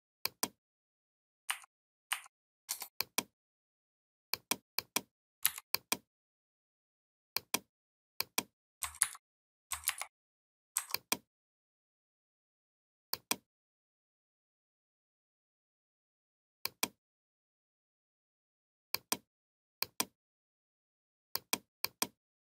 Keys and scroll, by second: 1.3 a, 5.3 v, 8.8 ctrl+c, 9.7 ctrl+f.